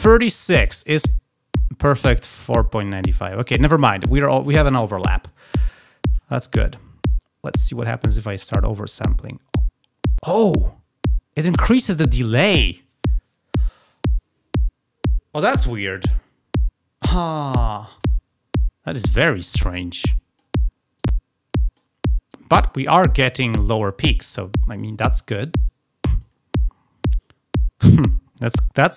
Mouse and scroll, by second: 3.3 click, 7.6-11.3 drag, 19.3-20.4 drag, 20.9-21.8 drag, 25.7 click.